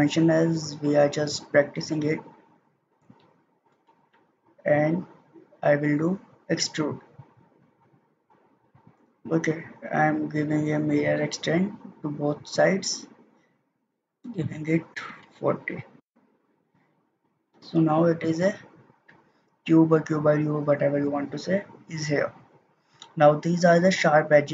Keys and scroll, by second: 14.8-15.7 typing, 15.9 Return.